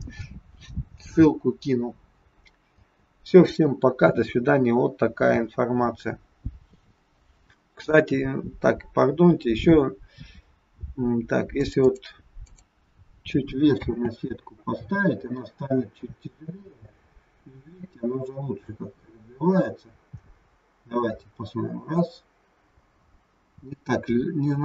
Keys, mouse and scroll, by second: 2.7 space, 7.7 click, 9.3-10.4 scroll down 7, 10.4-10.7 scroll up 1, 11.6 click, 11.9 click, 12.5 click, 13.7 space.